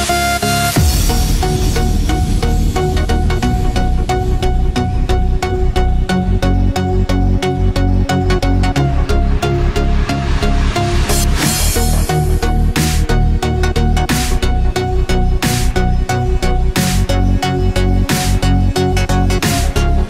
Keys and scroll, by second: 1.3 ctrl+=, 14.9 ctrl+-, 16.2 ctrl+z, 17.6 ctrl+=.